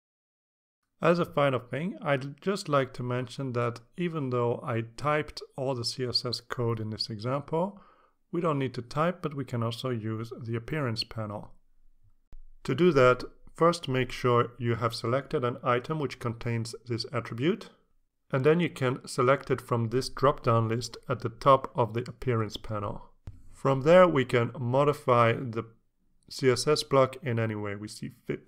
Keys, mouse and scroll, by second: 13.3 click, 19.5 click, 20.7 click, 22.2-23.9 scroll down 6, 25.1 click, 25.9 click, 26.4 click, 26.8 click, 27.9 click.